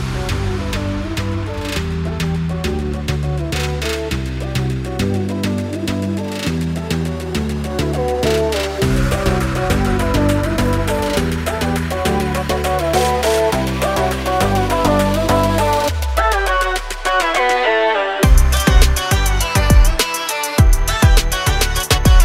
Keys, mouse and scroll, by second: 5.9 alt+Num_Lock, 6.1 scroll up 1, 6.7 scroll up 1, 8.6 click, 12.5 click, 16.0 click, 17.7 click, 19.2 click.